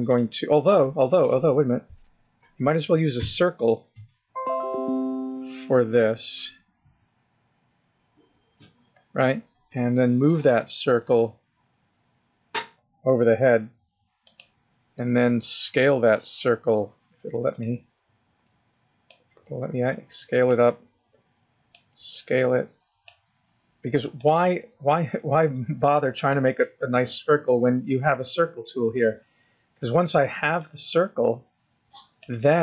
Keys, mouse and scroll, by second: 3.6 click, 3.8 click, 5.7 click, 5.9 click.